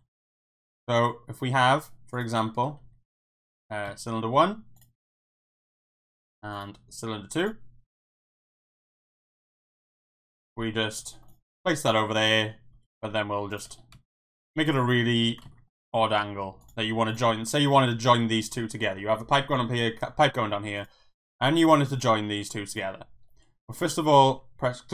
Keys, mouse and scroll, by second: 0.5 shift+a, 2.8 s, 3.5 click, 3.8 s, 3.8 z, 4.7 click, 5.2 shift+middle click, 5.8 shift+d, 6.2 z, 6.5 click, 7.4 click, 7.8-8.3 middle drag, 8.4 click, 8.8-9.3 middle drag, 10.0 KP_1, 11.0 g, 11.4 r, 11.8 click, 12.0-12.5 middle drag, 12.7 r, 13.1 z, 13.5 click, 13.7 g, 13.9 x, 14.1 click, 14.6-15.0 middle drag, 15.5 ctrl+z, 15.6 middle drag, 16.1 g, 16.6 click, 16.8 middle drag, 17.3 middle drag, 18.6-19.0 middle drag, 20.5 middle drag, 20.8 click, 21.4 click, 22.0 click, 22.2 middle drag, 23.8 shift+click.